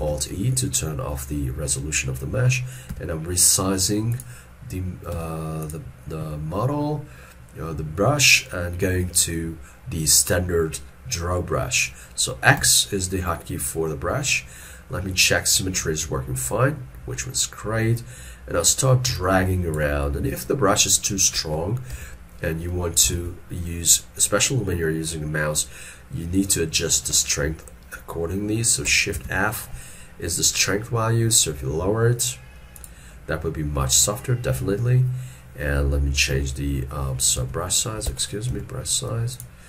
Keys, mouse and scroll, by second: 0.0 alt+e, 6.6 middle click, 12.7 x, 14.3 middle click, 21.6 scroll, 22.0 ctrl+z, 23.1 ctrl+z, 29.2 shift+f, 36.4 s.